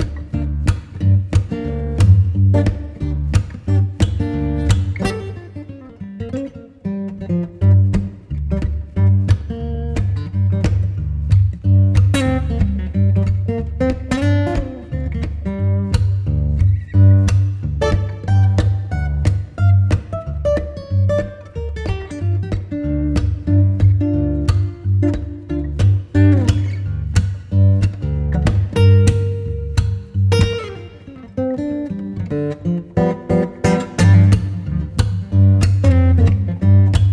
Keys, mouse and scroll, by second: 3.5 middle click, 10.0 double click, 11.8 double click, 11.8-12.6 typing, 16.8 ., 17.5 3, 17.6 Return, 19.6-22.4 typing, 33.1 3, 34.0 Return.